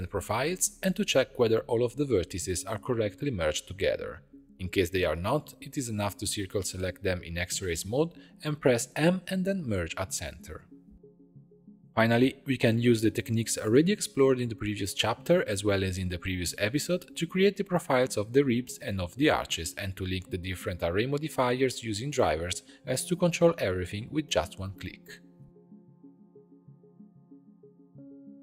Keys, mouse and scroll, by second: 0.0-0.3 typing, 0.6 right click, 0.7-4.1 drag, 5.5 click, 6.1 click, 6.3 Tab, 6.8 click, 7.1 1, 8.3 click, 8.9 c, 10.3 m, 11.2 Tab, 12.2 click, 13.0 click, 13.7 click, 14.5 click, 15.2-15.7 scroll down 1, 15.7-17.6 middle drag, 17.6 alt+\, 18.2 click, 19.1-19.6 drag, 19.6-21.6 right drag, 22.4 click, 23.3-24.9 right drag, 24.9-25.6 middle drag, 25.6-26.9 drag, 27.1-28.4 middle drag.